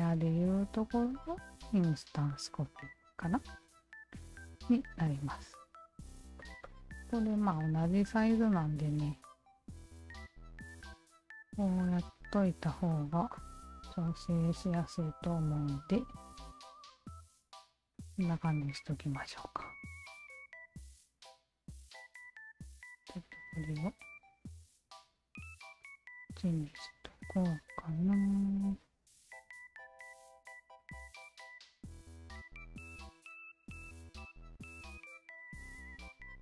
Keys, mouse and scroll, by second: 1.9 click, 2.6 click, 4.4 e, 5.3 click, 6.4 click, 6.6-7.4 alt+drag, 7.9 alt+click, 9.3 Tab, 10.5-12.4 alt+shift+drag, 13.0 Tab, 13.3 click, 13.7 alt+right click, 14.1-16.8 alt+drag, 17.1 alt+right drag, 17.5-18.7 alt+drag, 18.9-20.2 alt+drag, 20.5-21.5 alt+right drag, 21.6 alt+click, 22.9 click, 24.0 alt+click, 25.4 alt+click, 25.8 alt+click, 27.2 alt+click, 28.1 w, 29.1-30.2 drag, 30.5 alt+click, 30.8-33.0 alt+drag, 34.9 alt+click, 35.7 alt+click, 36.0 alt+click.